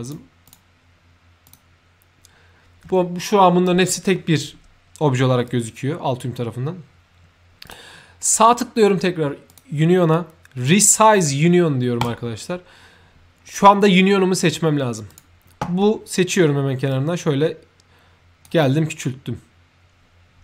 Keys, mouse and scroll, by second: 0.3 shift+click, 1.3 shift+click, 5.3 shift+click, 7.5 shift+click, 8.1 shift+right click, 9.4 shift+click, 11.9 shift+click, 15.0 shift+click, 16.8-18.4 shift+drag.